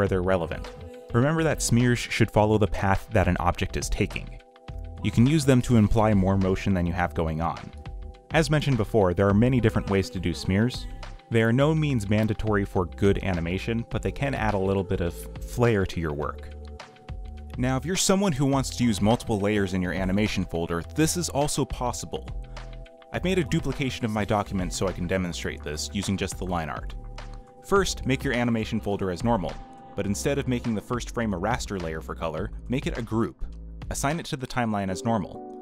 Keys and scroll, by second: 0.2 ctrl+z, 2.5 b, 3.7 b, 4.0 z, 5.4 space, 5.7 space, 6.1 b, 6.5 z, 7.7 z, 8.6 ., 9.7 space, 10.6 ctrl+z, 11.0 ctrl+z, 14.0 ., 20.4 space, 27.9 ctrl+z.